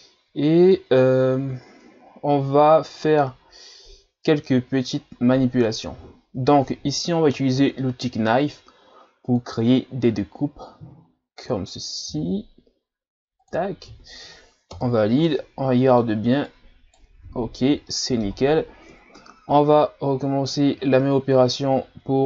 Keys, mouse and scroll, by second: 0.4 scroll up 1, 1.0-1.9 ctrl+scroll up 1, 1.9-2.3 scroll up 1, 3.8-4.8 ctrl+scroll up 1, 4.8-7.3 shift+scroll up 1, 7.6 k, 15.2-16.5 middle drag, 16.5 right click, 17.2 ctrl+z, 17.6 scroll down 2, 17.9-18.9 middle drag, 18.9 KP_7, 19.8-20.7 ctrl+scroll up 2.